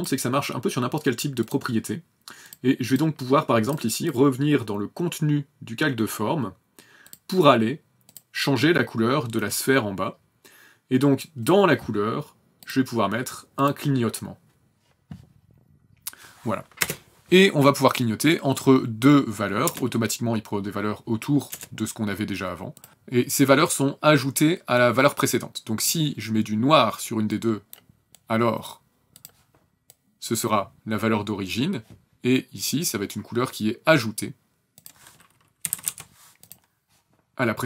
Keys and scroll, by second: 16.8 space, 19.6 KP_0, 21.5 KP_0, 35.6 KP_2, 35.7 KP_5, 35.8 KP_8.